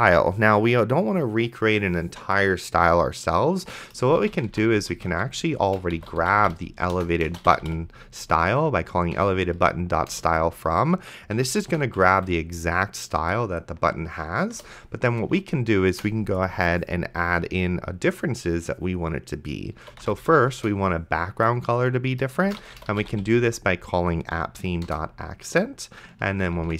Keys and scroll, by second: 4.0-9.1 typing, 10.1 Return, 11.4 End, 11.7 ;, 12.0 BackSpace, 14.5 Return, 19.7-20.6 typing, 22.6 p, 23.0 h, 24.6 Down, 24.9 Return, 26.4 ,.